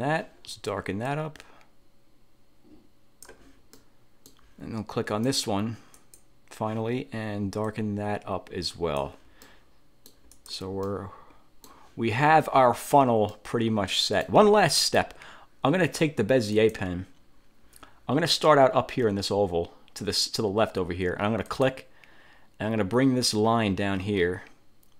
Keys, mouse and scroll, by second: 1.2-3.6 drag, 3.9 middle click, 5.2 click, 6.1 click, 7.8-9.3 drag, 9.6 middle click, 10.1 click, 11.0-12.0 drag, 13.4-14.5 drag, 14.8 middle click, 16.7 click, 21.6 click.